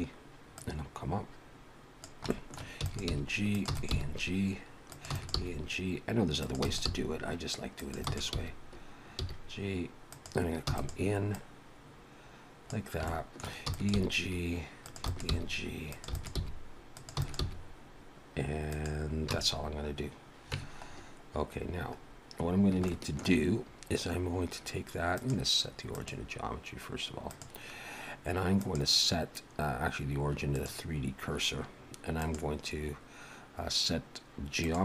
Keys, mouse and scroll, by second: 0.6 click, 2.3 shift+middle click, 2.8 e, 3.1 g, 3.7 e, 3.9 g, 5.1 e, 5.3 g, 6.6 e, 6.8 g, 8.0 click, 10.7 e, 11.3 click, 13.1 shift+middle click, 13.7 e, 14.0 g, 15.0-17.4 typing, 19.3 a, 19.6-20.0 scroll down 4, 20.6 Tab, 20.8-21.3 scroll down 3, 21.5-22.7 scroll down 8, 22.9 shift+middle click, 23.5-24.1 scroll up 3, 25.2 click, 28.6 click, 32.1 click.